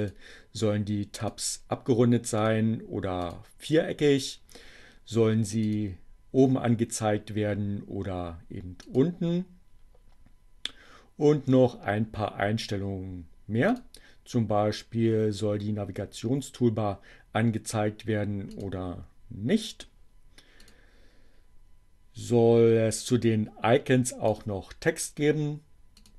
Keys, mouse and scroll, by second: 1.3 click, 2.4 click, 3.2 click, 4.4 click, 7.2 click, 13.3 click, 16.9 click, 20.5 click, 24.3 click, 26.0 click.